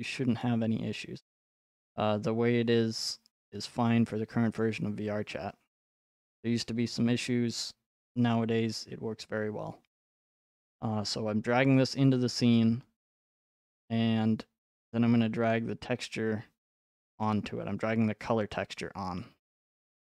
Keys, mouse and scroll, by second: 4.6 click, 6.5 f, 7.2-7.7 scroll, 17.3 click.